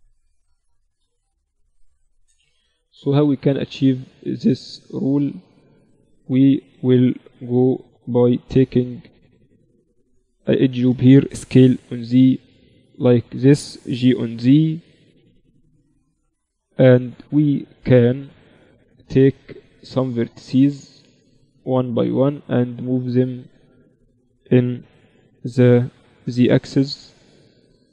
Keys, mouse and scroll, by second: 0.4-1.6 right drag, 0.9 z, 1.6 Tab, 2.2 z, 3.4 z, 3.9 z, 5.0 z, 6.4 z, 7.4 ctrl+r, 11.2 s, 14.0 g, 17.3-19.8 middle drag, 19.3-21.3 drag, 19.3 right click, 20.6 a, 21.3-22.9 middle drag, 21.6 b, 22.9-24.7 drag, 24.3 a, 25.0 b, 26.6-27.9 drag.